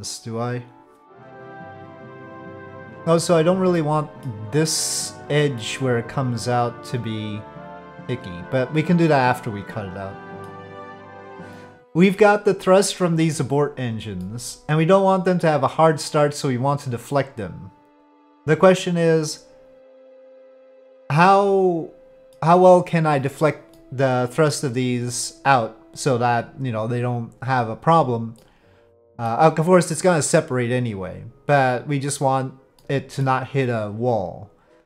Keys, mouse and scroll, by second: 1.2-3.1 drag, 3.8 middle click, 5.7-10.5 middle drag, 11.0-12.1 middle drag, 14.3-22.3 middle drag, 23.7 middle click, 28.4 middle click, 32.8 middle click.